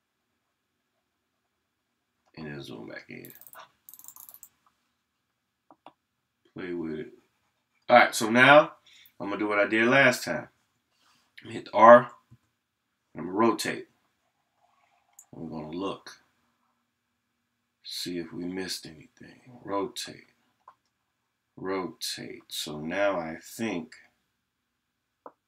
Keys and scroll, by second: 5.7 ].